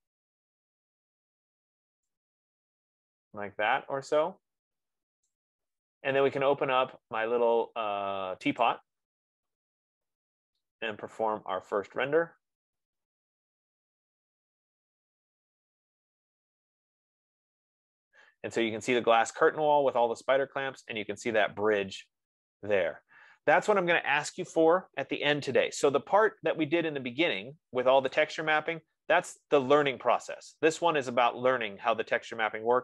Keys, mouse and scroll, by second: 0.1 middle click, 0.9 middle click, 1.0 middle click, 2.0 middle click, 3.3 scroll, 5.5 right click, 9.0 click, 28.6-30.3 drag, 31.8 F15.